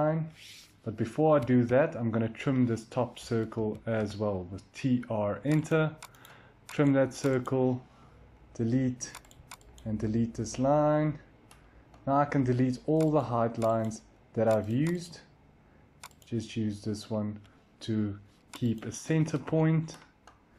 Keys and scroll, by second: 1.3 Escape, 1.5 Escape, 3.1-3.4 typing, 8.3 Delete, 9.6 Delete, 13.8 Delete, 19.1 Escape, 19.3 Escape.